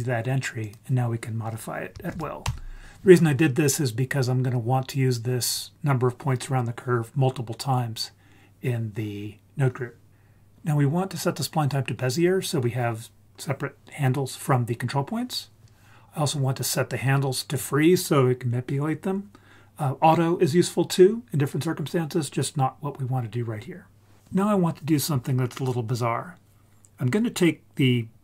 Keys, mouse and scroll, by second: 0.6-2.5 drag.